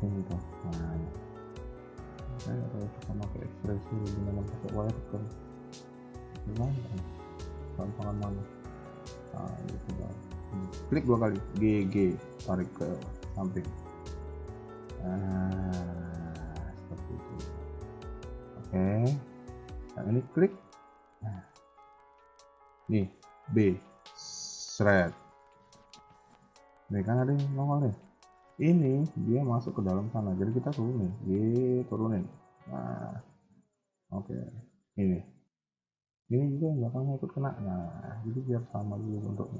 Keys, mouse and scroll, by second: 0.1 click, 0.1 b, 0.6-1.7 scroll down 8, 1.1 shift+middle click, 1.9 shift+middle click, 2.2-2.7 scroll up 3, 2.6 KP_3, 3.7 shift+click, 4.1 shift+middle click, 5.0 shift+click, 5.4 KP_1, 5.7 scroll down 2, 6.0 shift+middle click, 7.8 g, 11.4 g, 18.8 a, 18.9 a, 19.6 b, 21.9 shift+middle click, 22.2-22.6 scroll up 3, 22.4 a, 23.0-24.7 scroll up 2, 23.0 a, 23.4 b, 24.7-25.2 scroll down 7, 25.2 shift+middle click, 25.6-26.5 scroll up 2, 30.6 g, 32.7 scroll down 3, 33.1 shift+middle click, 33.4 scroll up 3, 33.6 a, 33.7 a, 34.1 b, 35.9 scroll down 2, 36.2 middle click, 37.1 KP_1, 37.4-38.0 scroll up 2, 38.0 g.